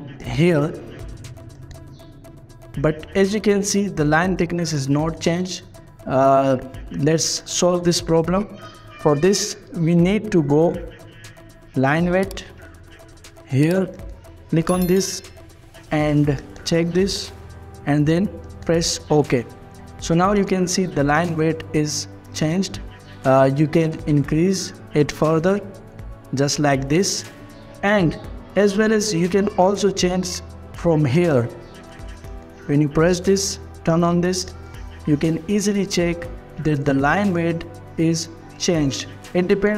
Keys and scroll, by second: 4.2 Escape, 9.2 Escape, 10.6-13.0 typing, 20.8 Escape, 26.9 Escape, 28.7 Escape.